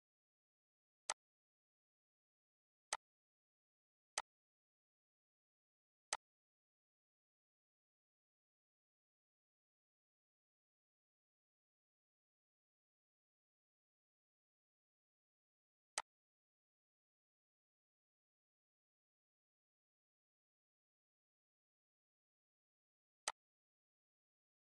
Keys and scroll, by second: 0.7 -.